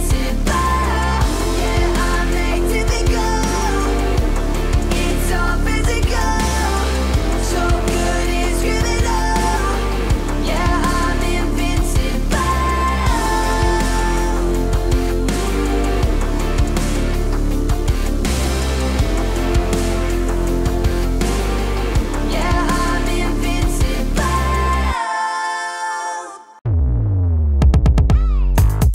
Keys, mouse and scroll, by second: 0.6 p, 1.3-3.6 drag, 6.1 p, 6.7-7.9 drag, 8.3 shift+s, 9.2-9.9 drag, 10.9-12.5 drag, 13.5-15.3 drag, 15.9-16.3 click, 20.9-22.1 typing, 26.9 s, 28.5-28.9 drag.